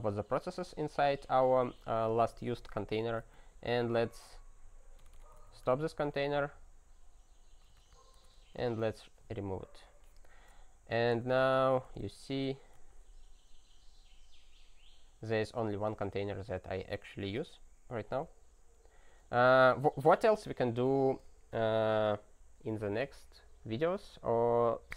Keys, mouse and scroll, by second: 3.3 alt+d, 3.5-6.0 typing, 6.1 ctrl+p, 7.8 alt+b, 8.1-9.1 typing, 10.9-12.9 typing, 18.1 alt+w, 19.7 ctrl+n, 19.9 ctrl+n, 20.3 ctrl+n, 20.4 ctrl+a, 20.7 Return, 21.0 ctrl+s.